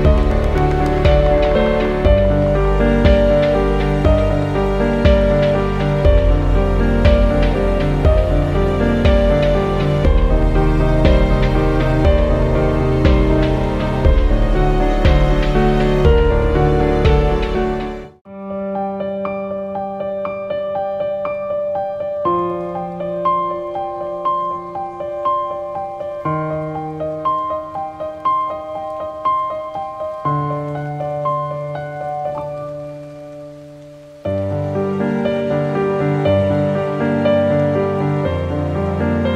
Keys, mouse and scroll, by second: 0.3 click, 2.2 ctrl+t, 6.0 click, 8.2 click, 13.8 click, 14.8 shift+Down, 17.7 shift+Down, 22.1 shift+Up, 24.4-30.9 drag, 30.9 ctrl+t, 32.3 alt+click, 35.6 scroll up 1, 37.2 click.